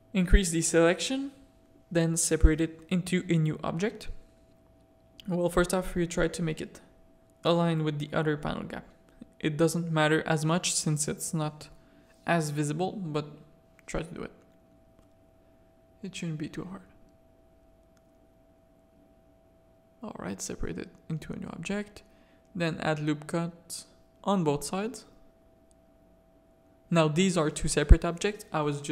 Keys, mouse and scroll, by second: 1.8 z, 2.6 z, 4.3 alt+click, 5.0 g, 9.0 c, 12.1 g, 12.6 c, 14.6 g, 16.3 a, 17.0 3, 17.4 1, 17.9 3, 18.3 click, 19.3-20.3 drag, 20.3 Tab, 21.2 Tab, 21.5 a, 22.6 ctrl+r, 24.2 a, 25.2 ctrl+r, 27.1 Tab, 27.7 z.